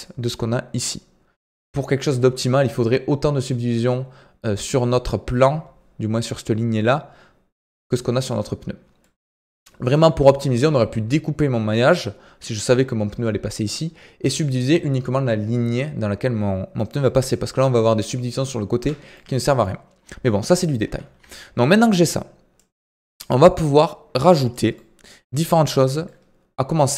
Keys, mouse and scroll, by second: 0.3-1.8 scroll down 1, 8.7 scroll down 2, 9.0-10.0 middle drag, 10.0 scroll up 2, 16.9 Tab, 18.7 Tab, 19.1-19.8 middle drag, 19.8-20.8 scroll down 2, 20.8 KP_1, 21.1 KP_3, 22.5-24.7 drag, 24.7-25.0 middle drag, 25.0 scroll up 3, 25.5-26.9 shift+middle drag.